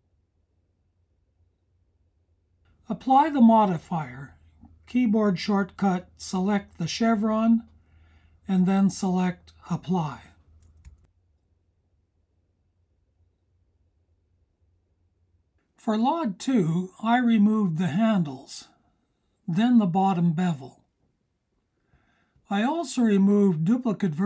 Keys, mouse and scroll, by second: 3.8-7.6 drag.